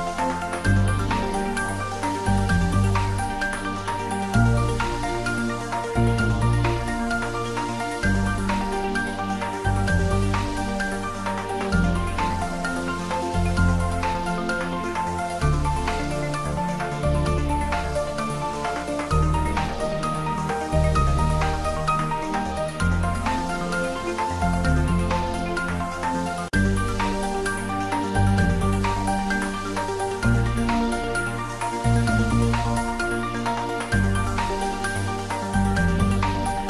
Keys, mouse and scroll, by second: 0.9 click, 2.3 click, 3.6 click, 5.3 click, 6.4 click, 7.8 click, 10.9 click, 12.4 click, 16.1 click, 22.9-25.0 drag, 25.0-25.9 scroll down 1, 26.2 click, 26.8-27.8 scroll up 1, 28.8 ctrl+s, 31.2 scroll down 1, 31.7-33.0 middle drag, 33.0 scroll up 1, 35.6 click.